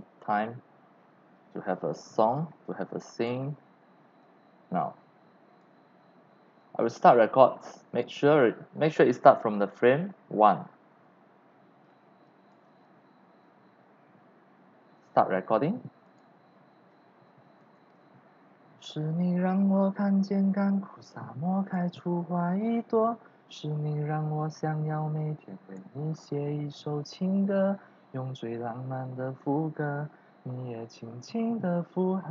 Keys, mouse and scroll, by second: 2.4 click, 4.2-5.6 drag, 5.8-6.3 scroll down 2, 8.1 click, 11.8-12.5 drag, 16.0 click, 20.4-21.7 drag, 21.9 click, 22.5 click, 24.8 click, 25.2 click.